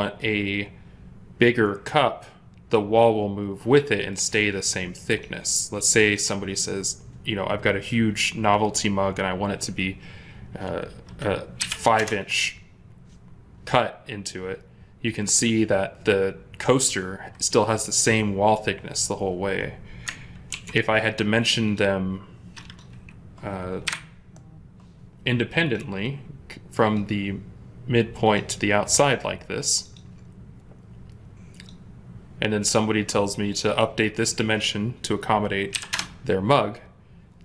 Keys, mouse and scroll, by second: 5.9 double click, 11.5-11.9 typing, 11.8 Return, 20.4 ctrl+z, 23.7 Delete, 33.6 double click, 35.6 typing, 35.8 Return.